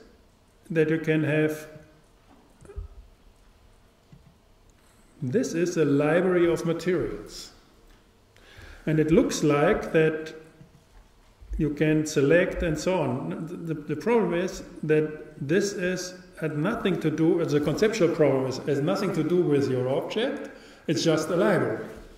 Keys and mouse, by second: 1.8-3.6 drag, 4.8-6.0 drag, 15.4-17.2 drag.